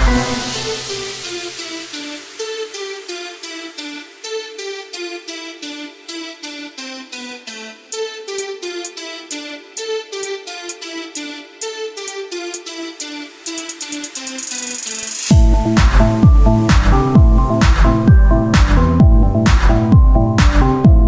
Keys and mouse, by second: 0.8-3.0 drag, 0.9 z, 3.3 KP_1, 3.7 z, 4.4 shift+d, 5.5 z, 6.4-7.5 drag, 7.5 KP_1, 7.9 z, 8.7 shift+d, 10.0 z, 11.1 KP_1, 11.4 z, 12.0 Tab, 14.9-16.0 middle drag, 15.7 right click, 16.6 z, 17.4 Tab, 18.0 ctrl+Tab, 18.8 z, 19.1 c.